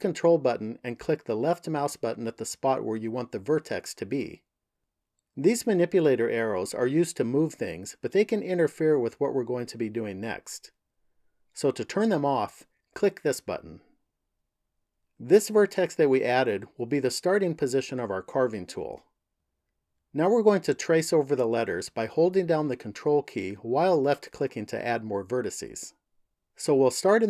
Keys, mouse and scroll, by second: 1.5 ctrl+click, 12.6 click.